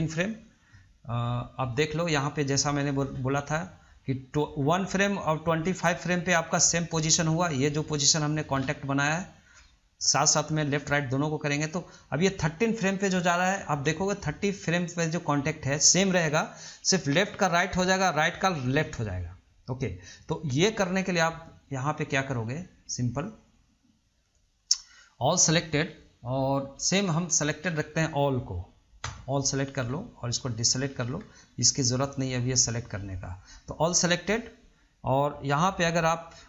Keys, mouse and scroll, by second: 30.4 click, 32.3 ctrl+click.